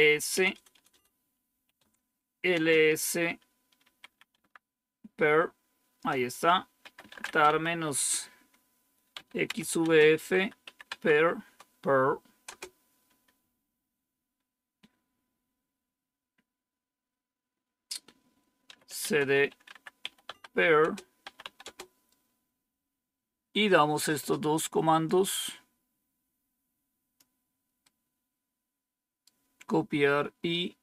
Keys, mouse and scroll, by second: 0.0-2.4 typing, 3.5-4.4 typing, 5.8 Return, 6.5-11.0 typing, 12.1-13.6 typing, 18.3-21.6 typing, 25.0-27.1 drag, 27.7-29.8 right drag, 30.4 right click.